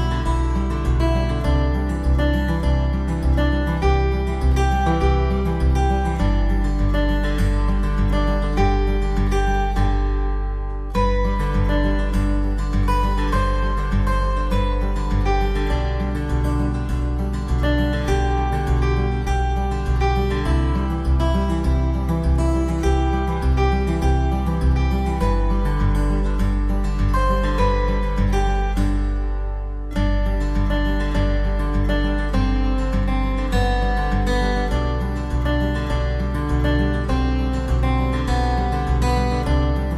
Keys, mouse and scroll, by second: 2.3 alt+w, 3.3 alt+middle click, 9.8 alt+middle click, 12.4 alt+w, 13.1 middle click, 13.8 e, 18.7 KP_5, 18.7 Return, 29.1 alt+w, 31.6 s.